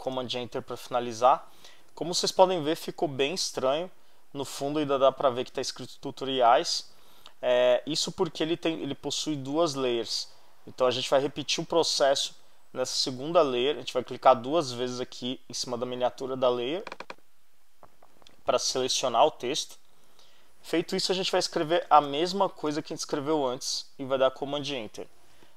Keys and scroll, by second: 0.0 super+Return, 21.4-22.6 typing, 24.2 super+Return.